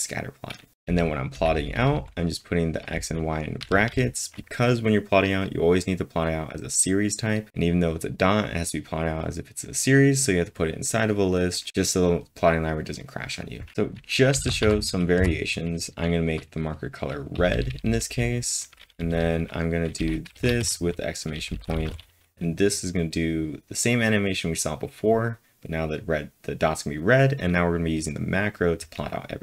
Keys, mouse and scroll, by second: 0.6-1.4 typing, 14.3-15.1 typing, 17.1-21.8 typing.